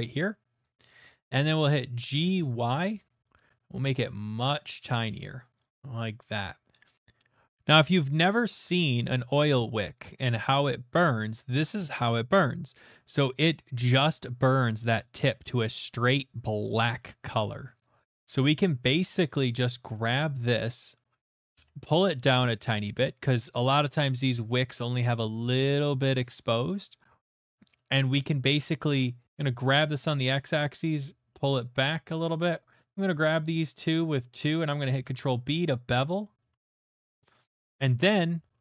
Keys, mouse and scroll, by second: 0.7 click, 0.9 ctrl+click, 2.2 typing, 5.6 shift+click, 6.4 middle click, 6.8 middle click, 7.0 click, 8.6 click, 11.0 click, 17.7 right click, 18.4 middle click, 18.5 middle click, 18.6 middle click, 19.1 middle click, 19.3 Tab, 19.9 middle click, 20.8 middle click, 21.5 typing, 24.2 middle click, 24.3 click, 25.5 typing, 26.5 click, 27.0 middle click, 27.0 typing, 27.1 middle click, 27.2 middle click, 27.4 shift+middle click, 27.7 shift+middle click, 29.0-29.8 typing, 29.3 click, 30.7 shift+click, 31.3 middle click, 32.1 2, 32.7 click, 33.6 shift+click, 34.2 middle click, 34.9 ctrl+b, 34.9 shift+right click, 36.0 right click, 36.5 middle click, 36.9 Tab, 37.5 middle click, 37.9 shift+middle click, 38.5 click.